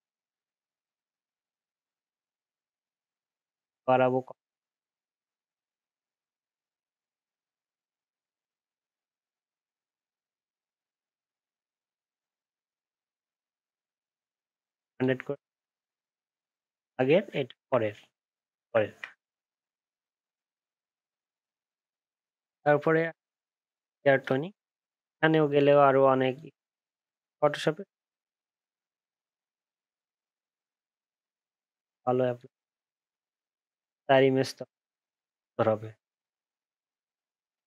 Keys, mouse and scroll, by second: 16.9 ctrl+z, 17.5 ctrl+shift+z, 18.2 ctrl+shift+z.